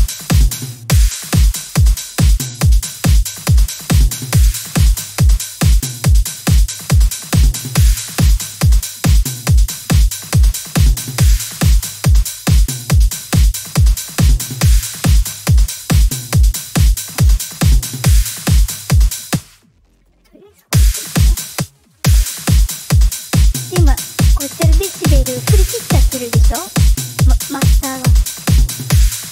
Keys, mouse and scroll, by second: 0.5 space, 0.7 space, 2.1-7.4 drag, 8.0-9.9 drag, 10.5-11.9 drag, 13.0-17.0 drag, 19.2 space, 20.6 space, 21.4 space, 21.9 space, 26.8 click, 27.2 click.